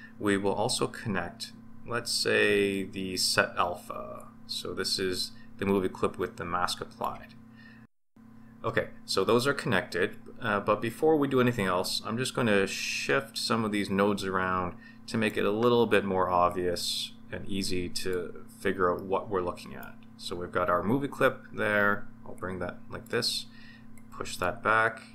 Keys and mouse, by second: 4.1 click, 4.4-7.1 drag, 12.7 click, 13.2-15.3 drag, 16.4 click, 16.8-18.1 drag, 18.9-19.8 middle drag, 22.3-23.1 drag, 23.9-24.5 drag.